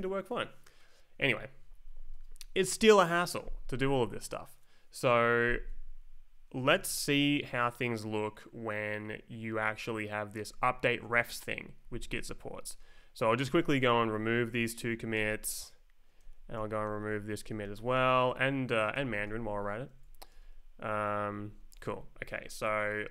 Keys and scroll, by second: 1.6 Up, 6.6 Down, 9.1 Up, 12.2 Down, 13.9 shift+Down, 14.5 d, 15.2 Return, 16.2 Left, 16.5 Down, 16.6 space, 17.1 Right, 17.4 d, 17.7 Return, 18.9 d, 19.3 Return, 19.9 Left, 20.1 Down, 20.3 space, 20.8 Right, 21.2 Down, 21.7 Up, 22.6 Down.